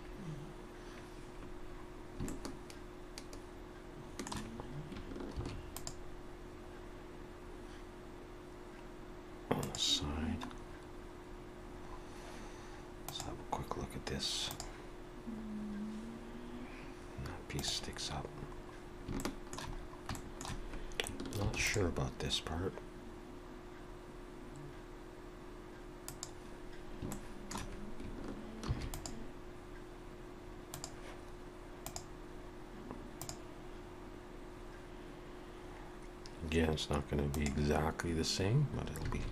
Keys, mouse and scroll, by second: 2.3 shift+middle click, 5.3 ctrl+r, 10.5-11.3 scroll up 2, 11.3 scroll down 1, 11.5-13.2 scroll down 2, 13.2 scroll down 1, 18.5-19.1 scroll up 2, 19.2 shift+middle click, 19.8 scroll up 2, 20.1 shift+middle click, 21.4 ctrl+r, 27.1 shift+middle click, 28.6 ctrl+r, 39.2 alt+a.